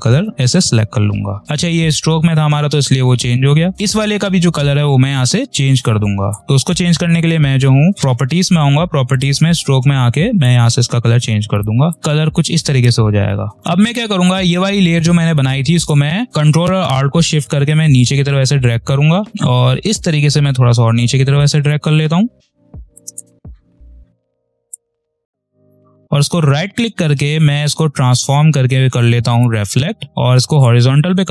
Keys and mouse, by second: 0.4 click, 1.4 ctrl+z, 6.1 click, 12.7 space, 13.0 click, 13.2 space, 13.5-19.3 drag, 19.3-20.9 alt+shift+drag, 20.9 space, 21.1 click, 21.4 space, 22.3-24.3 shift+drag, 24.3 right click, 27.2 click.